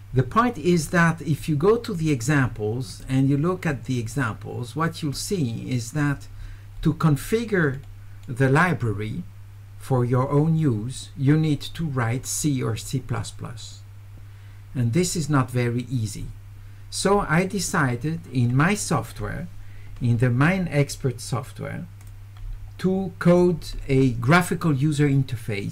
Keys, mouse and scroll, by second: 1.4 click, 2.9 click, 5.2 click, 6.8 middle click, 7.2 middle click, 7.8 middle click, 15.6 middle click, 15.6 scroll up 2, 22.1 click, 23.4 click.